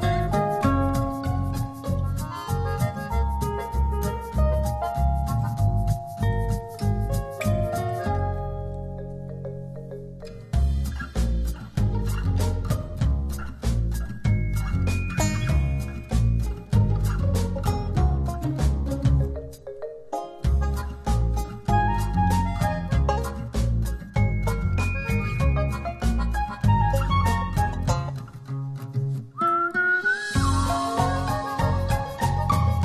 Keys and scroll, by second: 0.6 alt+h, 3.4 super+0, 6.4 z, 9.7 space, 10.3 z, 12.0 space, 13.7 z, 15.0 v, 16.5 p, 18.8 super+z, 18.9-20.9 typing, 20.1 super+z, 20.2 super+z, 22.1 space, 22.7 space, 23.2 space, 23.8 space, 29.6 super+j.